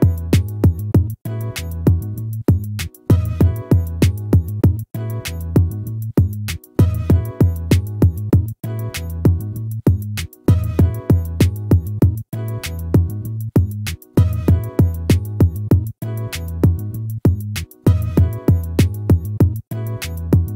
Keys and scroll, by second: 8.4 ctrl+-, 17.2 ctrl+-.